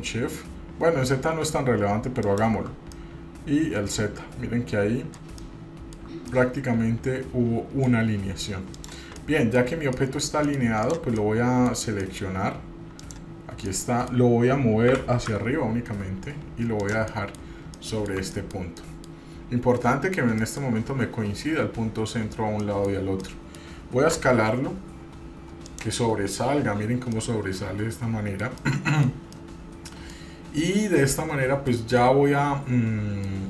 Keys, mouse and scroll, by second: 2.4 shift+click, 3.1-5.4 middle drag, 5.6-6.2 shift+middle drag, 6.5-8.1 middle drag, 8.9 drag, 9.4-9.8 middle drag, 9.9 scroll up 1, 10.1 middle click, 10.7 middle click, 11.0 click, 11.3-11.9 middle drag, 12.2 middle click, 12.4-13.0 scroll up 2, 13.3 click, 13.9 middle click, 15.1 g, 17.3 middle drag, 17.7 scroll up 1, 17.9-18.3 shift+middle drag, 18.5-19.3 middle drag, 19.4-20.0 scroll up 3, 20.6 shift+middle click, 22.8 middle click, 23.1-23.4 scroll down 1, 23.4 middle click, 24.3 s, 27.3-28.7 middle drag, 27.3 scroll down 1, 28.8 middle click, 29.6-30.1 middle drag, 30.3-31.9 middle drag, 32.2-33.4 middle drag.